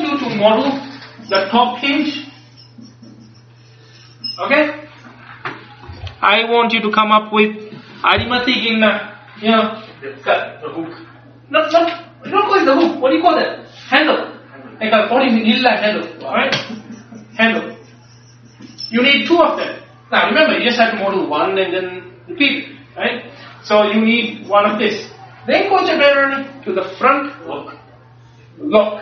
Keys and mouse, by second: 6.5 middle click.